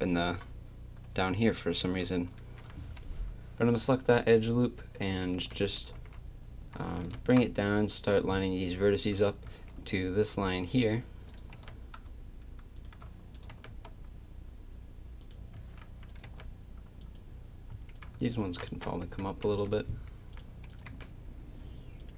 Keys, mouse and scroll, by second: 5.3 g, 7.0 g, 9.4 z, 11.3 click, 11.5 g, 13.5 g, 15.5 a, 16.2 g, 17.7 a, 19.0 g, 20.9 g.